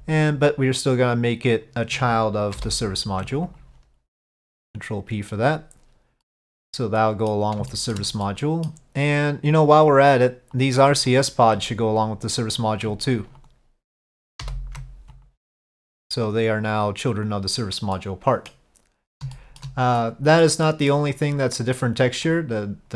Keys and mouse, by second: 2.7 ctrl+p, 4.7 click, 6.3-7.4 middle drag, 7.8 shift+middle drag, 8.3-8.8 middle drag, 10.7-11.0 drag, 11.2 ctrl+click, 13.5 ctrl+click, 14.5 ctrl+p, 17.3 click, 18.0-18.6 middle drag, 19.4 shift+middle drag, 20.1-20.5 middle drag, 20.7 middle drag, 22.4-22.9 drag.